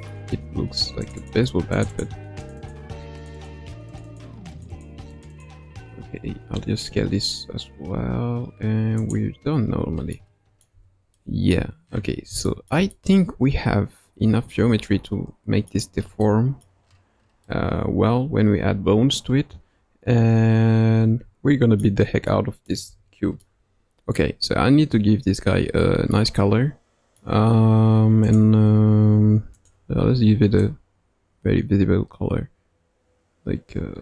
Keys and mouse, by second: 1.0 click, 1.2 click, 1.7 click, 1.9 click, 2.6 click, 3.4 click, 3.8 click, 4.0 click, 4.5 click, 4.7 click, 5.1 click, 5.3 click, 6.2 s, 9.6 Tab, 10.1 middle click, 10.7 Tab, 11.1 middle click, 12.4 shift+middle click, 12.9-15.7 middle drag, 16.2 middle click, 17.4-21.8 middle drag, 22.2 middle click, 22.9 Tab, 23.4 middle click, 26.1-27.2 middle drag, 28.2 click, 29.5 click.